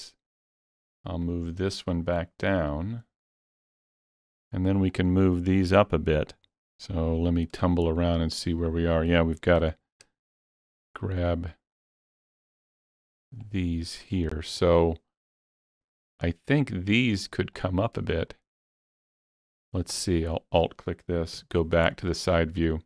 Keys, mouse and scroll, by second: 0.4 click, 1.3 click, 2.8-6.5 drag, 7.5-9.5 drag, 7.6-14.7 middle drag, 9.5 alt+z, 11.8 click, 12.8 click, 13.8 click, 14.7-19.2 middle drag, 20.2 shift+click, 21.4 KP_3.